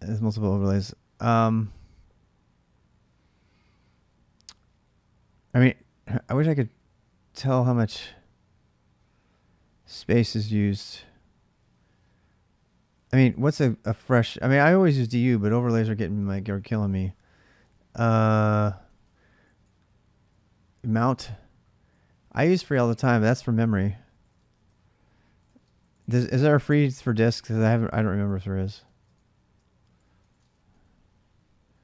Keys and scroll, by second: 6.3-7.2 typing, 13.1 ctrl+a, 13.4 typing, 14.8-15.7 typing, 17.3 shift+space, 22.6 ctrl+a, 22.6-26.6 typing, 27.7-31.8 typing.